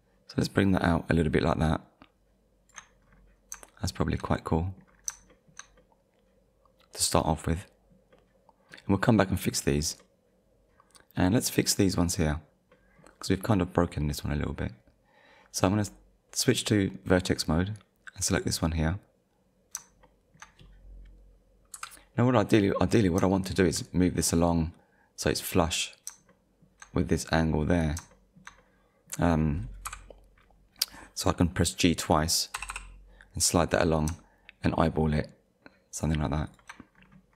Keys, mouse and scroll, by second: 3.0-3.4 scroll down 1, 3.8 shift+middle click, 4.9 scroll down 2, 5.3 shift+middle click, 5.8 middle click, 9.4 scroll up 1, 10.0 middle click, 10.3 shift+middle click, 11.7 scroll up 1, 12.7 middle click, 14.0 middle click, 16.3 click, 17.4 middle click, 18.4 click, 18.9 middle click, 21.7 KP_1, 22.8 scroll up 1, 23.4 shift+middle click, 26.3 shift+middle click, 28.1 shift+middle click, 29.9 KP_1, 32.6 g, 36.5 shift+click, 36.9-37.3 scroll up 1.